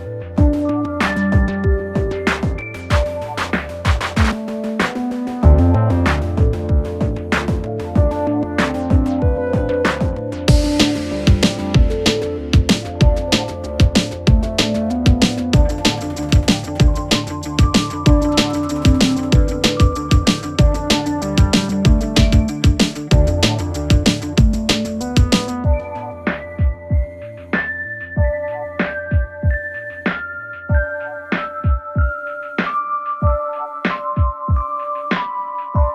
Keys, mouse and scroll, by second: 3.3 right click, 4.2 click, 5.9 click, 7.8 click, 9.5 click, 11.1 click, 12.7 click, 13.8 click, 14.3-15.6 typing, 16.6-17.1 click, 21.5 Return, 24.2 alt+click, 26.2-27.6 typing, 29.3 click, 34.4-34.8 click, 34.9-35.9 typing.